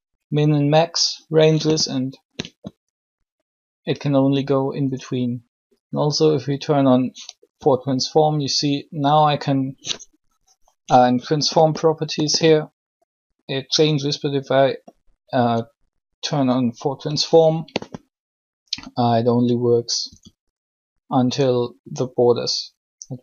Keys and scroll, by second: 7.5 r, 19.8 r.